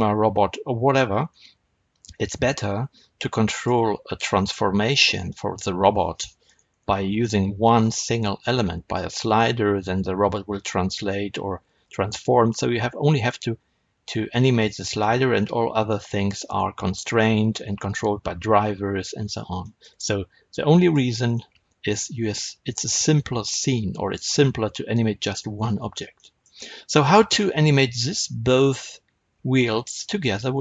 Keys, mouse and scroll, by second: 1.2-1.5 scroll up 2, 1.5-3.4 scroll down 2, 3.4 click, 8.5-10.5 scroll up 2, 10.5-12.5 scroll up 1, 12.9-14.5 scroll down 2, 14.5-20.7 shift+middle drag, 20.7 click, 21.2-26.0 middle drag, 30.5 click.